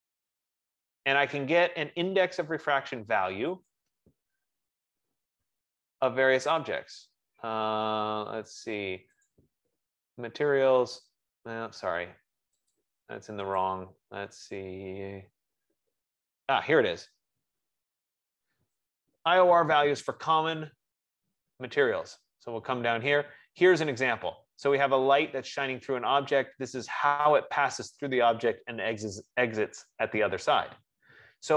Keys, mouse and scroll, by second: 4.0-7.0 drag, 9.5 click, 12.9 click, 13.6 F15, 13.7 click, 15.5 middle click, 17.3 click, 21.1 middle click, 21.2 middle click, 21.3-22.7 scroll, 29.5-30.0 scroll, 30.4-31.5 scroll.